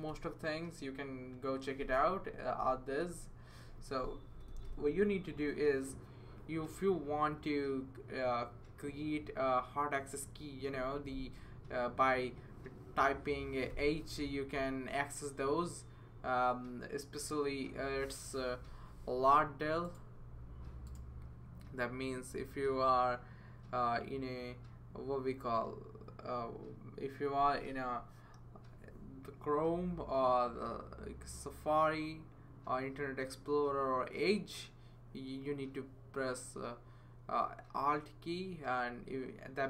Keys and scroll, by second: 0.1 BackSpace, 4.3 BackSpace, 4.5 BackSpace, 4.6 BackSpace, 13.7 h.